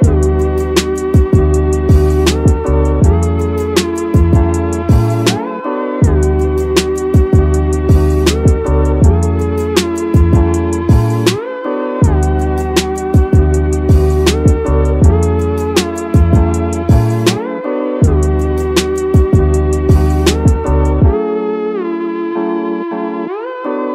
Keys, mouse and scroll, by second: 3.3 click, 3.6 scroll up 1, 4.1-6.7 drag, 6.7-7.4 scroll down 2, 7.4 Tab, 8.8 scroll down 2, 9.2 click, 9.6-10.3 middle drag, 10.5-10.9 middle drag, 12.3 KP_3, 13.6 click, 13.9 Tab, 14.4 Tab, 14.7 click, 14.9 Tab, 15.5 shift+middle click, 15.8-16.2 scroll up 1, 16.3 click, 17.1 shift+middle click, 19.1 click, 19.9 click, 21.6-23.8 drag.